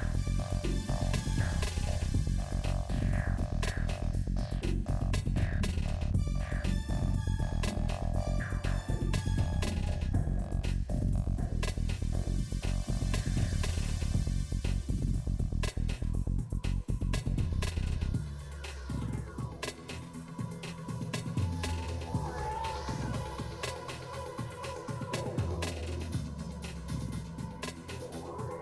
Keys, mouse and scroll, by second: 0.9 click, 2.7 shift+click, 3.8 shift+click, 4.5-5.6 shift+middle drag, 5.8 click, 6.5 middle click, 6.8 shift+click, 7.7 middle click, 8.5 scroll down 1, 8.6 middle click, 9.8 shift+middle click, 10.9 shift+click, 11.3 middle click, 11.7-12.9 shift+drag, 12.9 middle click, 13.6 shift+click, 13.8-14.9 middle drag, 15.4 scroll down 3, 15.5 middle click, 16.2 scroll up 2, 16.2 s, 17.7 middle click, 17.9 ctrl+z, 18.3 shift+click, 18.4 shift+middle click, 18.9 shift+click, 19.3 s, 20.3 middle click, 20.5 scroll down 1, 20.8 shift+middle click, 21.5 middle click, 23.1-26.2 shift+drag, 26.2 middle click, 26.6 shift+click, 26.8 middle click, 27.1 shift+click, 27.4 middle click, 27.7 shift+click, 28.4 middle click.